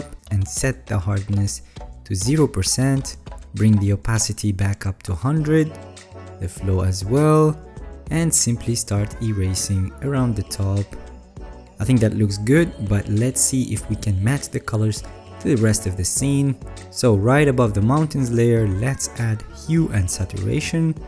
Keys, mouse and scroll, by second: 3.5 alt+right click, 12.1 alt+scroll.